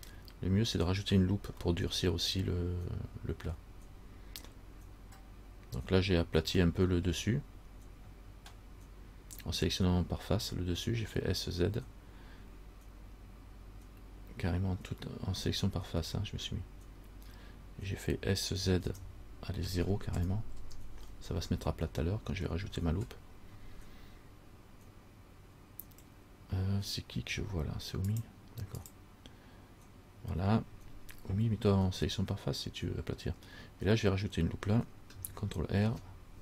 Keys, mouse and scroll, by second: 2.0 middle click, 2.0 scroll up 1, 3.8-5.0 scroll down 1, 6.9 middle click, 6.9 scroll up 1, 7.3-9.9 scroll down 1, 15.6 middle click, 18.8 s, 21.6 scroll up 1, 21.7 middle click, 22.6 scroll down 1, 36.0 ctrl+r.